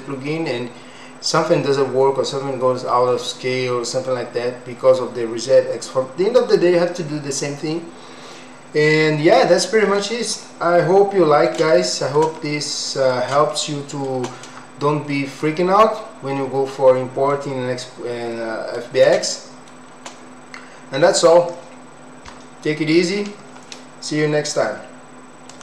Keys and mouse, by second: 10.4-11.5 middle drag, 11.7 shift+middle click, 12.4 middle click, 13.5 shift+middle click, 15.5-17.3 middle drag, 18.4 middle click, 19.2 shift+middle click.